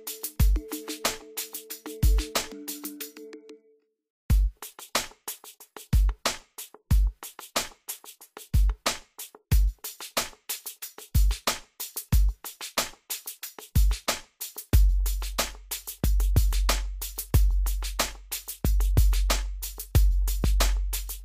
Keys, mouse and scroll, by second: 0.4-1.8 drag, 1.8 scroll up 1, 2.6 click, 3.0-4.1 scroll down 1, 4.1 click, 5.2 scroll up 1, 6.0 click, 6.4 scroll down 1, 7.2 click, 7.8 scroll up 1, 8.6-9.2 scroll down 1, 10.4 right click, 10.8 click, 11.5 scroll up 1, 11.8-12.1 scroll down 1, 13.1-18.7 drag.